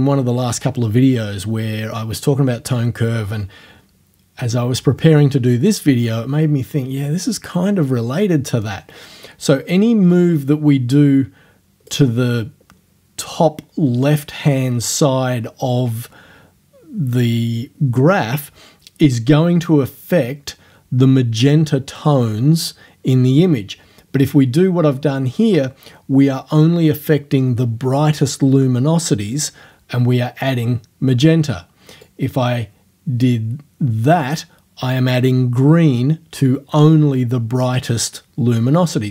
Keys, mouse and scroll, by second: 10.1-12.1 drag, 32.1-34.5 drag.